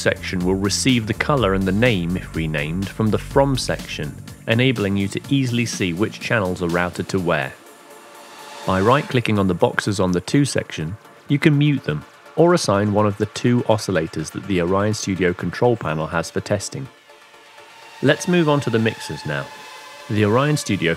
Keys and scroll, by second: 0.0-2.9 typing.